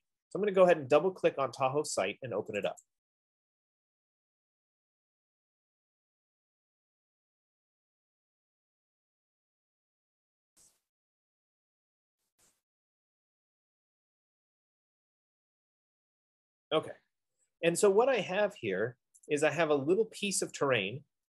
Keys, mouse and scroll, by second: 3.0 click, 3.6 click, 11.0 click, 12.7 click, 15.6 F15, 19.5 right click, 20.1 scroll.